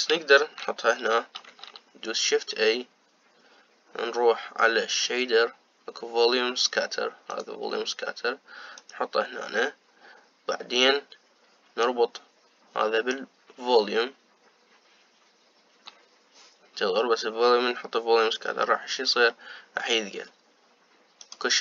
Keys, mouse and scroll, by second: 2.1 shift+a, 12.5 click.